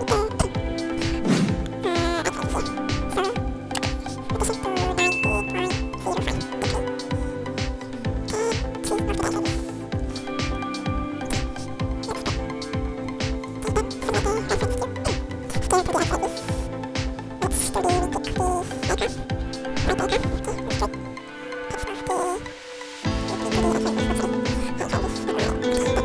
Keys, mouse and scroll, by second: 7.9 scroll up 3, 8.2 ctrl+click, 8.8 g, 9.0 x, 10.0 click, 10.1-10.4 scroll down 2, 10.3 ctrl+click, 10.6 scroll up 2, 10.8 scroll down 1, 11.0 scroll up 1, 11.7 ctrl+click, 12.4 scroll down 1, 13.0 n, 13.3 ctrl+click, 14.0 right click, 14.7 ctrl+click, 14.9 scroll down 1, 15.2 ctrl+click, 15.4 scroll up 1, 15.6 s, 15.8 x, 19.9 click, 20.1 scroll up 2, 20.4 scroll down 2, 20.5 ctrl+click, 20.7 scroll up 3, 21.0 ctrl+click, 21.4 scroll down 2, 21.5 right click, 22.0 scroll up 1, 23.1 g, 23.4 y, 24.1 click, 24.4 g, 24.6 x, 25.7 click, 25.9 scroll down 2.